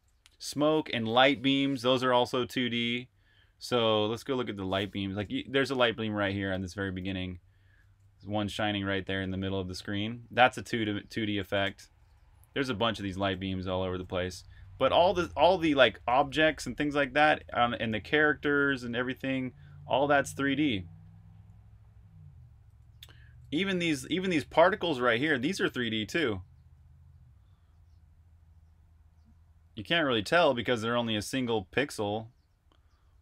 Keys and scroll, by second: 0.0-1.4 typing, 0.3 super+r, 5.8-17.3 typing, 18.5-27.1 typing, 28.1-28.9 typing, 30.0 e, 31.9-33.2 typing.